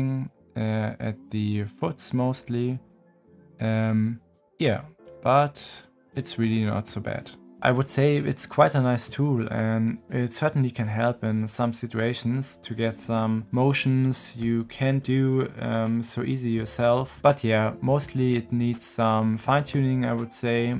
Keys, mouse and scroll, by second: 5.6 middle click, 6.4 drag, 6.6 middle click, 6.7 click, 6.9-20.7 middle drag.